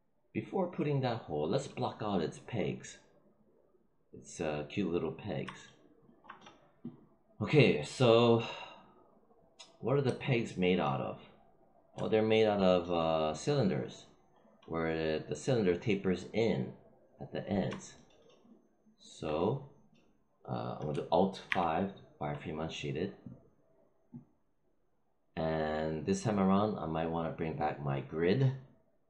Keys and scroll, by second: 21.4 alt+5.